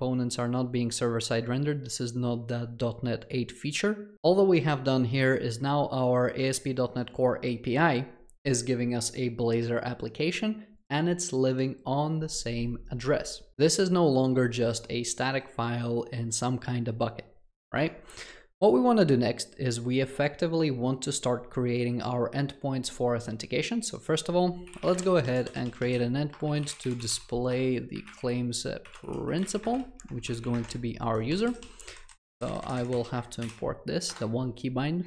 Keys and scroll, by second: 33.5 alt+Return.